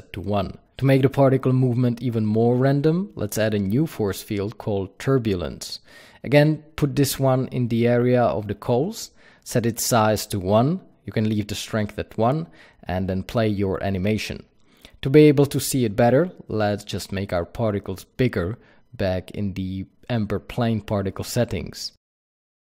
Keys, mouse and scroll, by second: 4.2 shift+a, 6.8 g, 8.8 click, 11.4-14.4 drag, 12.0 KP_Enter, 14.7 click, 19.4 click, 20.3-20.9 scroll down 1, 22.1 click.